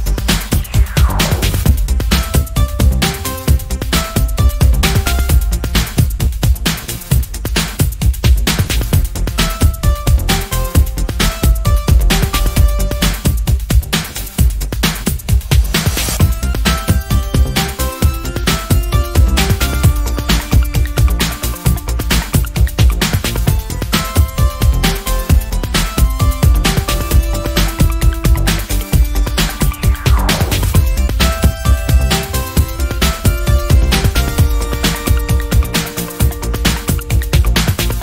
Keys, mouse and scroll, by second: 1.7 middle click, 2.0-2.8 ctrl+scroll down 4, 3.1 ctrl+click, 4.3 ctrl+click, 5.2-6.6 ctrl+drag, 7.3 click, 8.6 click, 9.5 ctrl+d, 9.8-11.1 ctrl+drag, 11.5 middle click, 12.1 ctrl+click, 13.3 click, 14.6-16.0 drag, 16.6 ctrl+shift+click, 19.0 ctrl+shift+click, 20.6 shift+click, 22.4 shift+click, 23.6 ctrl+shift+click, 24.6 ctrl+shift+click, 25.6 ctrl+shift+z, 25.8 click, 26.7 click, 29.0 click, 30.3 ctrl+click, 31.3 ctrl+click, 33.0 ctrl+click, 33.7 ctrl+shift+click, 35.1 g, 36.0 click, 36.7 click, 37.8 ctrl+shift+click.